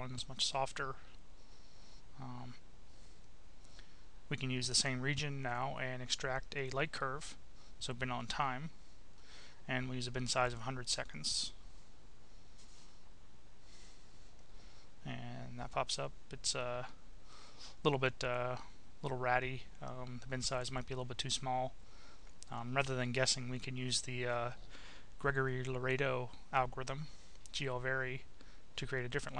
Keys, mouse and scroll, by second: 1.5 click, 2.6 click, 3.5 click, 4.4-6.0 drag, 7.0 click, 8.1 click, 12.1 click, 16.6-17.6 drag, 23.1 click, 24.7 click, 26.7-27.8 drag.